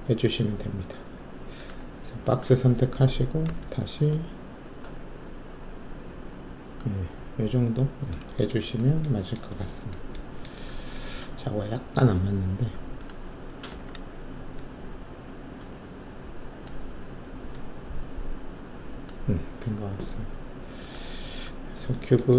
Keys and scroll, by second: 3.4 r, 13.6 w.